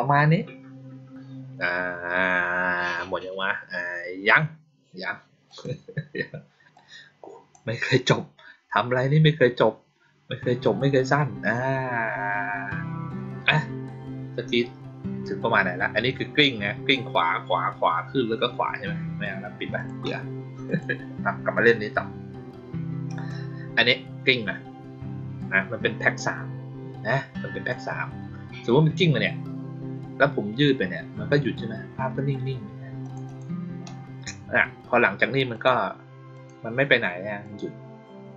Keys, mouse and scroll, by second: 5.4 click, 6.6-7.4 drag, 19.7 click, 20.6 click, 23.1 click, 32.9 click, 33.2 click, 35.4 click, 36.2 click, 36.8 click, 37.3 click.